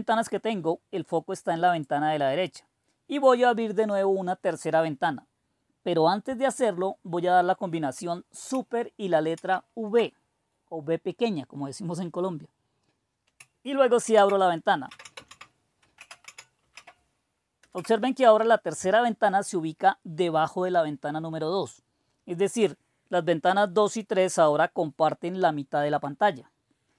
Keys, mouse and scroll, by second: 9.3 super+v, 13.9 super+d, 14.5-16.6 typing, 17.6 Return.